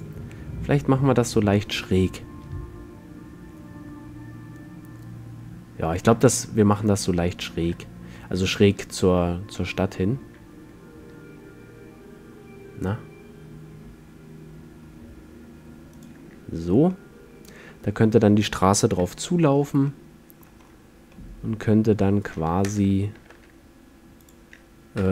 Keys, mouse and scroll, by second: 0.2-2.1 drag, 0.4 r, 16.2-17.0 drag, 17.0-17.4 middle drag, 19.0 KP_5, 20.8-21.8 middle drag, 22.8 ctrl+alt+KP_0, 23.4 shift+f.